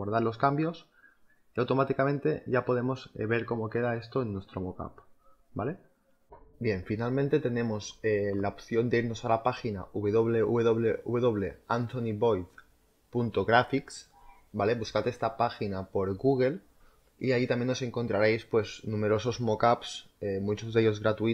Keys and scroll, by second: 3.6 z.